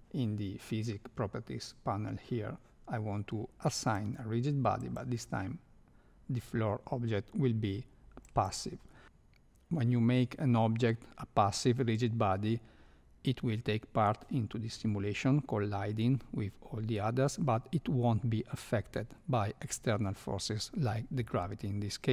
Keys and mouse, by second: 3.7 click, 4.8-8.4 drag.